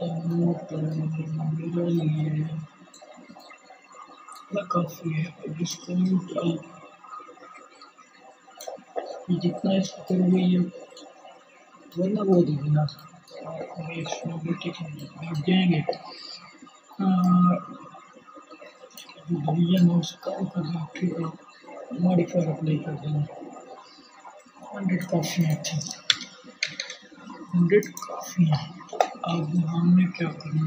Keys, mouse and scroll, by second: 23.1 click, 24.4-25.7 drag, 24.4 0, 30.1-30.6 middle drag.